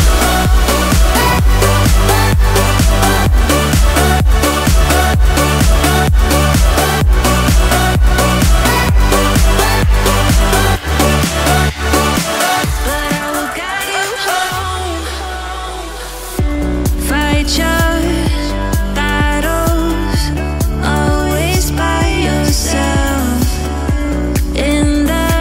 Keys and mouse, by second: 0.9 ctrl+p, 4.4 click, 5.7 click, 10.9 Tab, 15.3 click, 15.8 click, 18.0-25.4 drag.